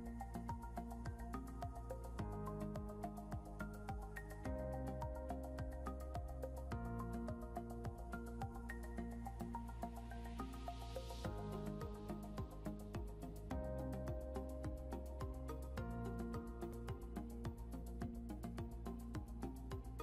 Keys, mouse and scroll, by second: 3.5 click, 6.3 Tab, 9.8 click.